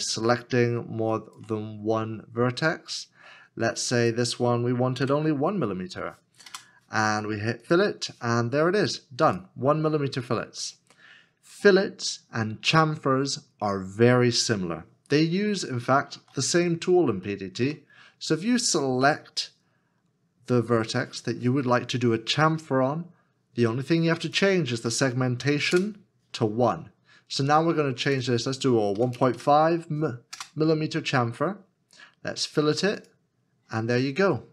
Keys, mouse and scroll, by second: 1.5 shift+click, 5.0 KP_1, 6.5 Return, 15.4 Return, 16.7-17.1 scroll up 1, 20.0 shift+middle click, 25.4 KP_1, 25.7 Return, 29.0 KP_1, 29.3 KP_5, 29.3 KP_Decimal, 30.3 Return.